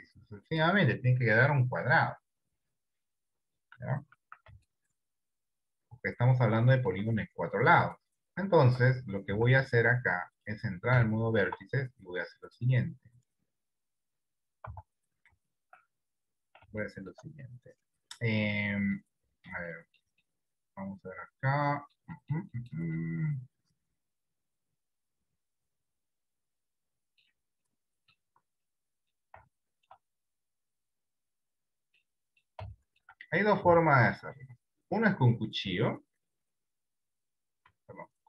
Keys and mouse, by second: 4.5 d, 7.0 d, 8.0 click, 8.8 Tab, 9.3 Tab, 10.5 click, 11.2 shift+middle click, 16.4 Tab, 16.9 shift+middle click, 17.6-19.1 middle drag, 19.8 middle click, 20.3-22.0 middle drag, 22.2 middle click, 22.7 middle click, 23.0-27.3 middle drag, 27.9 middle click, 28.4 Tab, 28.8 middle click, 29.8 shift+middle click, 32.2 middle click, 33.3 shift+middle click, 33.9 shift+middle click, 37.7 Escape.